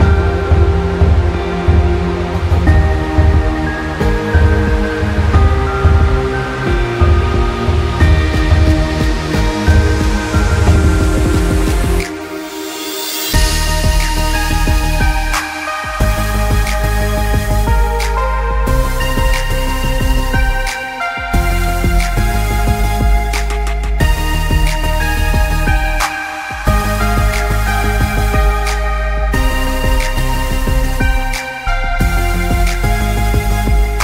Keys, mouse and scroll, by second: 0.3 click, 1.2 scroll up 1, 1.4 click, 1.5-2.2 scroll down 3, 1.7 click, 2.0 click, 2.2 click, 2.8 alt+scroll up 2, 3.1 click, 3.5 click, 3.6 space, 3.7 click, 4.0 ctrl+g, 4.1 click, 4.2 alt+scroll down 1, 4.3 scroll, 4.8 click, 5.1-5.5 alt+scroll up 4, 5.6 click, 5.8 z, 5.9 click, 6.1 Delete, 6.2-6.5 alt+scroll down 2, 6.6 scroll up 1, 6.7 alt+click, 6.9 z, 7.0 click, 7.5 alt+click, 8.5 click, 8.6-9.5 scroll down 3, 8.8 click, 9.1 click, 9.8 ctrl+z, 9.9 scroll up 2, 10.3 click, 10.9 scroll up 2, 11.0 click, 11.2 click, 12.0-12.5 scroll down 2, 12.1 space, 12.9 click, 13.3-13.6 alt+scroll up 2, 13.7 click, 14.1 click, 14.3 shift+click, 15.9 scroll up 1, 16.0 z, 16.2 click, 17.0 click, 17.8 scroll down 1, 18.6 click, 19.1 shift+click, 20.0 alt+scroll up 1, 20.3 space, 20.5 click, 20.9 shift+click, 21.9 shift+click, 23.5 alt+scroll down 1, 23.7 click, 24.1 space, 24.4 click, 24.9 shift+scroll up 1, 25.0 shift+scroll down 1, 25.1-25.6 scroll up 2, 25.3 shift+click, 25.7 space, 25.9 shift+click, 26.3 alt+shift+scroll down 1, 26.8 click, 26.9-27.5 alt+scroll down 3, 27.0 click, 27.5 space, 27.6 scroll up 1, 28.4 click, 29.6-30.0 alt+scroll up 2, 30.2 click, 30.5 click, 31.0 click, 31.4 ctrl+z, 31.6 click, 32.5 alt+scroll down 2, 32.8 alt+scroll up 1, 33.5 click, 33.6-34.0 scroll down 2, 33.7 s.